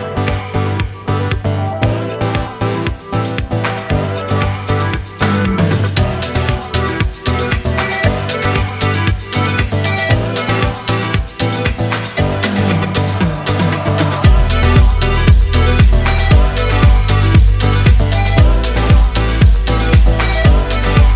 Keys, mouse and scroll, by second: 1.5 n, 1.8 n, 2.5 click, 2.9 click, 3.0 n, 3.3-4.0 scroll down 1, 4.0 scroll down 1, 4.0 n, 4.5 click, 4.5 n, 4.6-5.0 scroll up 3, 5.0-5.4 scroll down 1, 5.4 space, 7.5 space, 8.1 click, 9.3 n, 9.6 click, 9.7 n, 10.3 click, 12.9 alt+right click, 13.8 click, 19.9 Page_Up.